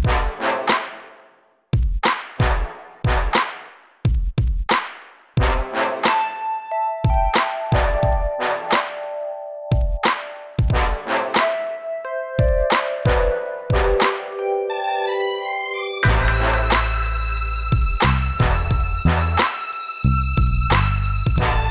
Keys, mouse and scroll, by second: 6.5 click, 6.8 click, 8.8 click, 9.4 click, 10.3 middle click, 11.3 middle click, 12.0 scroll up 2, 13.0 click, 13.8 click, 14.9 click, 16.0 click, 16.1 click, 17.0 click, 17.9 right click, 18.5 click, 19.7 click, 20.8 click.